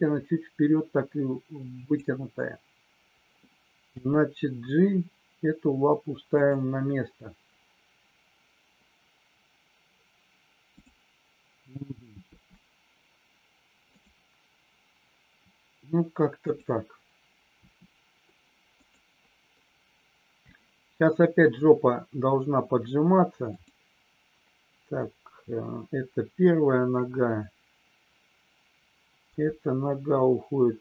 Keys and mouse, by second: 1.7 click, 3.8 g, 12.3 r, 17.6 r, 23.4 click, 29.2 g.